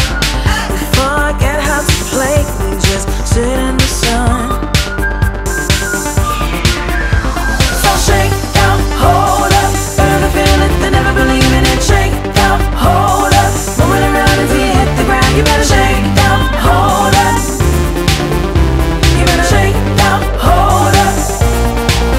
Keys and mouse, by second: 1.6 click, 2.8 click, 10.0 click, 11.4 click, 12.9-15.1 typing, 18.4 Return, 19.0-22.1 typing.